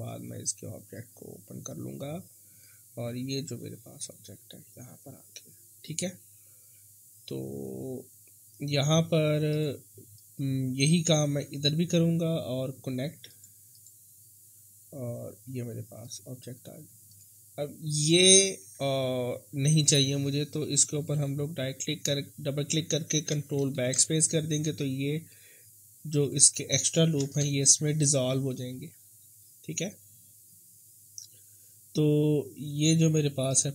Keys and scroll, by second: 23.6 ctrl+BackSpace, 27.2 ctrl+BackSpace.